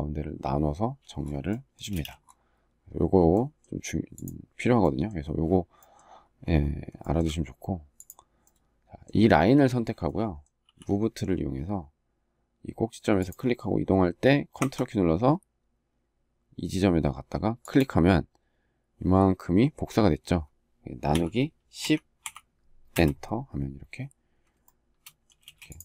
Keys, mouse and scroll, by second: 1.6 space, 6.7 shift+middle click, 22.6 Return, 24.3 shift+middle click, 25.1 space.